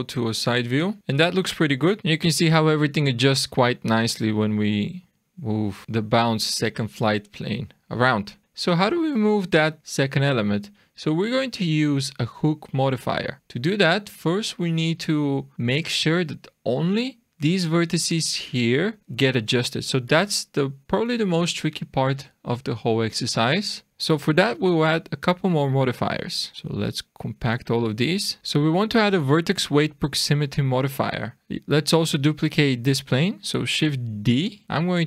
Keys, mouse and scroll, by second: 1.0 click, 1.0-1.9 scroll up 10, 1.9 click, 6.6-7.4 scroll down 5, 7.4 shift+middle click, 8.4 alt+a, 8.4 click, 8.4 middle click, 8.4 scroll down 1, 13.4-15.8 scroll up 2, 22.4-23.7 scroll down 2, 23.7 middle click, 23.9 scroll up 1, 24.2 click, 26.5 click, 29.3 click, 30.8-31.3 scroll down 7, 31.3 click, 31.3-31.8 scroll up 1, 33.3 middle click, 34.3 shift+d.